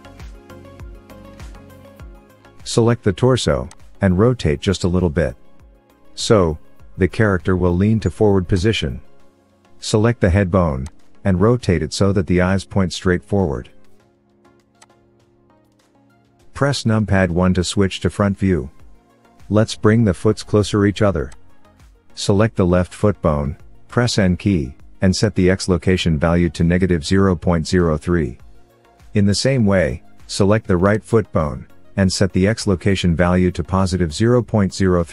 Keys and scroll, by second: 17.6 KP_1, 23.1 n, 23.1 n.